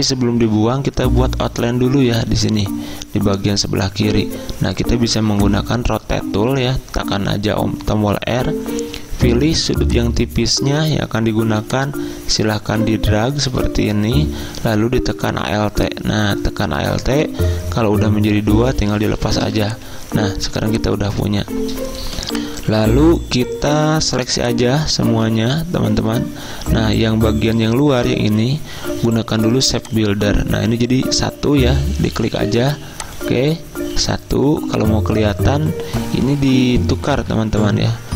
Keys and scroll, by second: 19.4 v, 20.4 z, 23.9 v, 37.2 ctrl+z.